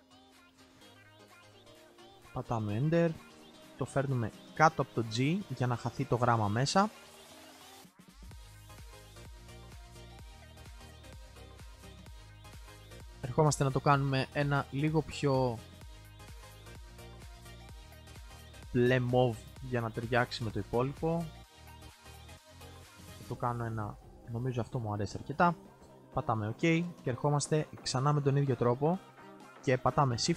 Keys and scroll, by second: 6.5 alt+c.